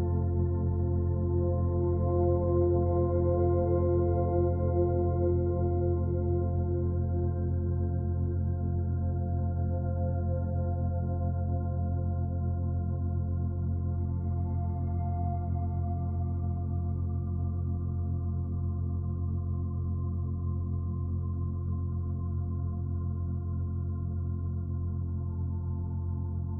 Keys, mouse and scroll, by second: 0.2-0.6 scroll up 7, 0.6 Tab, 1.1 Tab, 1.2 middle click, 1.5 scroll up 3, 1.6 Tab, 1.6 Tab, 2.2 Tab, 2.4 click, 3.1 click, 3.9 click, 4.3 click, 4.8 3, 4.9 click, 5.7 b, 6.5 Delete, 7.5 middle click, 7.8 2, 8.5 click, 8.7 g, 9.3-11.2 middle drag, 11.2 click, 11.5 z, 12.1 click, 13.2 z, 13.5 g, 15.1 ctrl+r, 16.9 3, 17.2 click, 17.4 e, 17.6-18.6 right drag, 18.6 2, 19.0 click, 19.3 e, 19.6 g, 20.3 g, 21.4-21.9 scroll down 7, 21.9-22.8 middle drag, 22.8-23.3 scroll down 1, 23.3 b, 24.6 o.